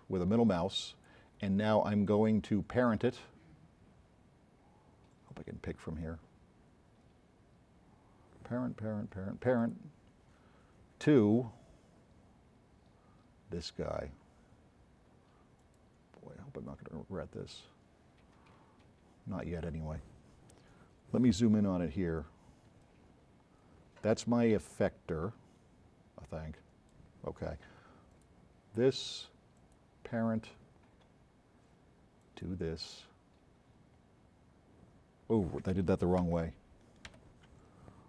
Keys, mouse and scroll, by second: 9.6 click, 15.7 click, 21.4 f, 22.7 s, 22.9 right click, 26.2 right click, 28.1 click, 29.6 click, 32.3 click, 36.4 z, 37.1 z.